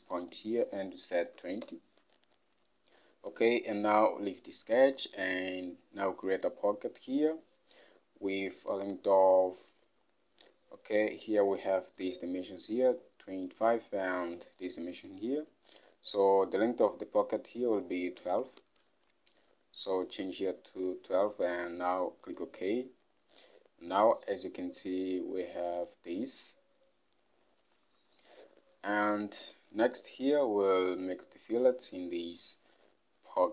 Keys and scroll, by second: 1.1-2.0 typing, 8.9 ctrl+Tab, 18.7 ctrl+Tab, 20.6-21.5 typing, 28.0 Home.